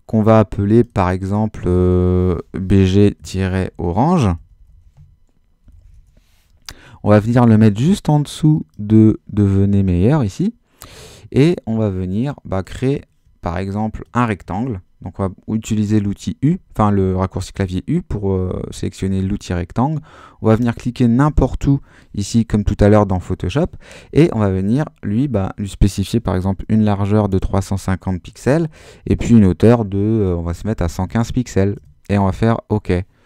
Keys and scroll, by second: 2.5-6.3 typing, 26.4-27.8 typing, 28.4 Tab, 30.6 1, 31.0 5, 31.8 Return.